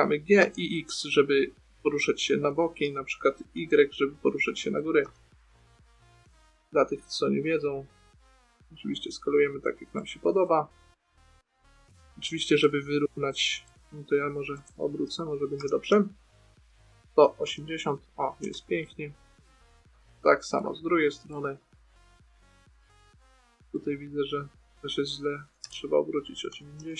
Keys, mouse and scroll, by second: 0.2 g, 11.5 middle click, 14.9 a, 15.2 a, 15.9 r, 19.4-21.1 middle drag, 22.4-24.7 middle drag, 26.0 r.